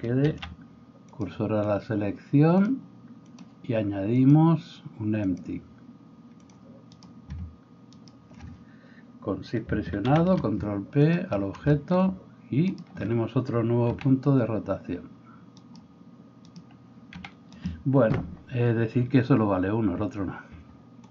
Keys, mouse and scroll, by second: 0.3 shift+s, 8.0 shift+middle click, 8.0 shift+right click, 10.1 ctrl+p, 13.9 r, 17.2 r.